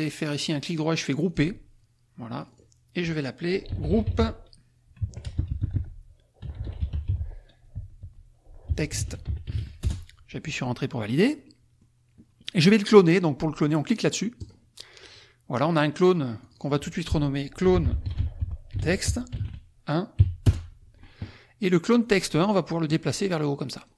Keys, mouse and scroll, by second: 1.3 click, 2.4 click, 3.5-5.2 typing, 5.0 Caps_Lock, 6.3-7.7 typing, 8.7-10.0 typing, 11.5 click, 14.3 click, 16.5 click, 17.4-20.2 typing, 20.4 Return, 22.3-23.9 drag.